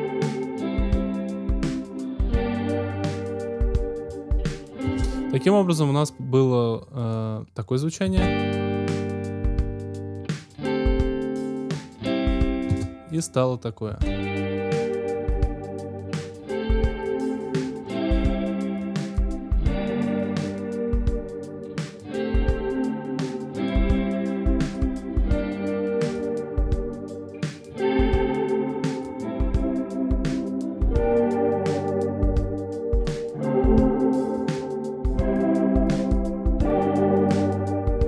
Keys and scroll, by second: 4.8 space, 8.0 space, 12.6 space, 13.8 space.